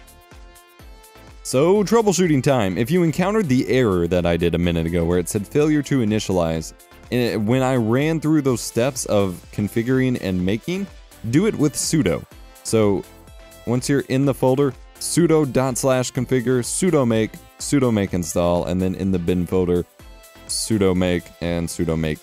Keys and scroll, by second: 9.3 F12, 11.0 Up, 11.2 Up, 11.4-13.2 Up, 14.4 Down, 16.2 Down, 17.4 Down, 19.6 Down.